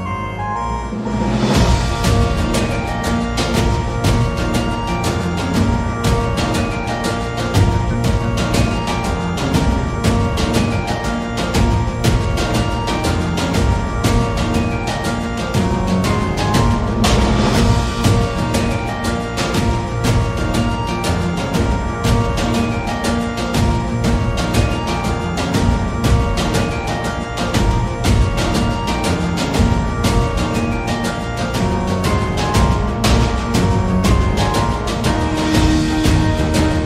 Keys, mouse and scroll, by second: 0.0 g, 0.7 Tab, 1.2 scroll up 1, 1.2 middle click, 1.5 a, 1.6 a, 2.1 middle click, 4.5 click, 5.8 Tab, 6.0-8.6 typing, 9.9 Tab, 10.5 g, 12.5 s, 18.8 shift+middle click, 22.0 Tab, 23.4 click, 23.4 1, 24.4 click, 25.3 middle click, 25.9 g, 27.7 click, 28.4 g, 29.9 Tab, 30.9 z, 32.3 Tab, 32.3 g, 32.3 z, 33.0 g.